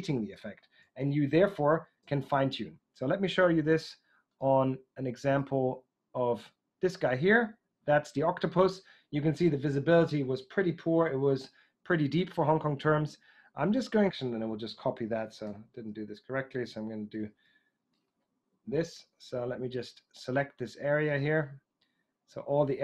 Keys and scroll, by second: 0.7 super+Tab, 14.0 super+d, 15.4 super+j, 17.1 super+n, 18.1 Escape.